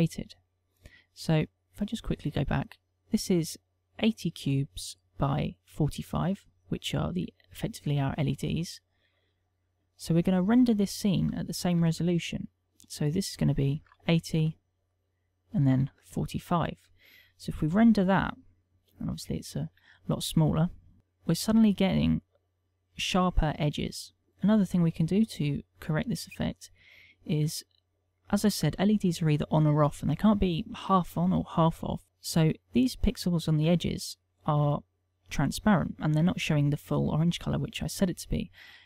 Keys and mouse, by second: 2.2 click, 9.2 click, 12.3 ctrl+click, 15.6 click, 18.8 F12.